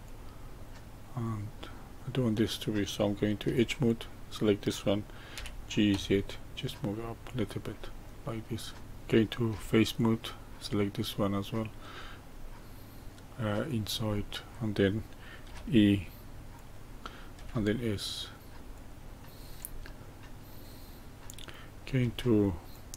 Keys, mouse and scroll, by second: 0.5-1.7 middle drag, 1.7 scroll up 1, 3.4 2, 3.8 click, 5.3 g, 8.0-8.8 middle drag, 9.4 3, 9.9 click, 10.5-13.6 middle drag, 13.6 click, 14.1-15.4 middle drag, 15.4 e, 17.4 s, 19.2-22.0 shift+middle drag, 22.0 2, 22.7 click.